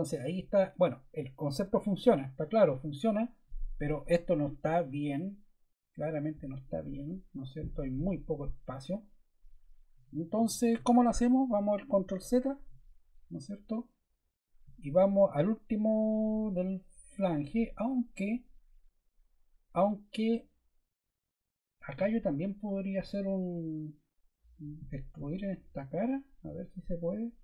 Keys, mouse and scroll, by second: 12.0 super+z.